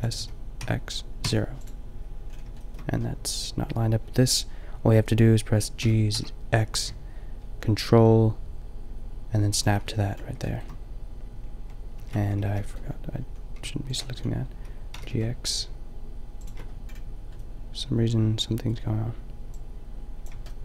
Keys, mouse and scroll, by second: 0.2 s, 5.8 g, 10.1 click, 12.0 ctrl+z, 12.5 b, 13.5 g, 14.2-16.4 middle drag, 14.9 g, 16.5 click, 17.3 click, 17.8 click.